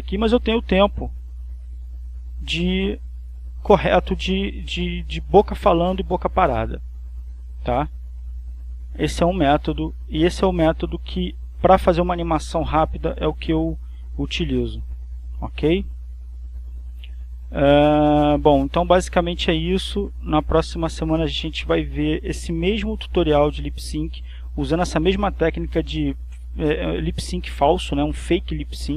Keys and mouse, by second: 0.0 click, 2.4 click, 3.6 click, 6.5 click, 9.0 click, 10.4-11.7 drag, 12.9 click, 15.4 click, 16.4-17.8 drag, 17.8 click, 20.8 click, 21.6-22.8 drag.